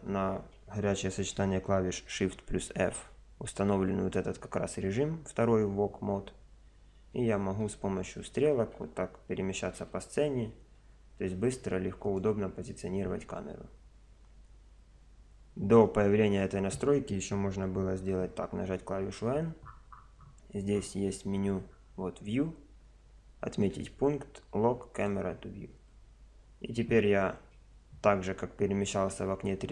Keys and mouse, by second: 2.9 shift+f, 18.5 n, 21.7-23.7 middle drag, 25.0 middle click, 25.8 n.